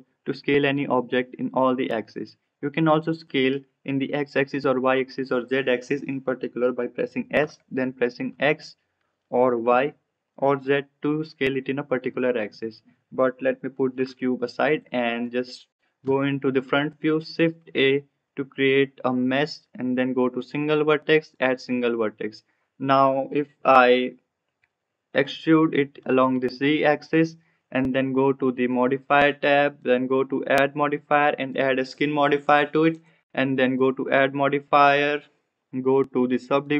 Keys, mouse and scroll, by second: 7.3 s, 13.6 g, 15.1 click, 16.0 KP_1, 17.1 shift+a, 25.0 e, 29.9-31.5 drag, 32.9 click, 33.9-36.7 drag.